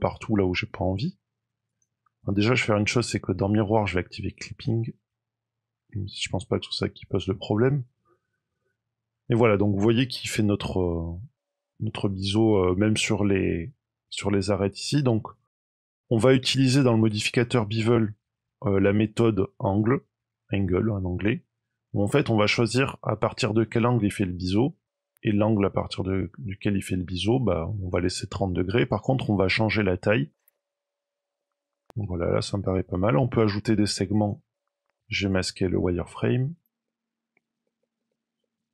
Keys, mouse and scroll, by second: 0.3 shift+middle click, 1.6 click, 4.3 click, 5.8 middle click, 8.4-8.8 scroll up 2, 15.1-15.6 scroll down 2, 20.8 click, 25.0 shift+click, 30.5 shift+click, 31.3-31.7 scroll down 3, 31.4 middle click, 31.7 scroll up 3, 31.8 middle click, 32.1 middle click, 34.1 click, 34.5 scroll down 3, 34.6 middle click, 34.8 middle click, 35.2 click, 36.8 middle click, 37.7 shift+middle click, 38.0 middle click.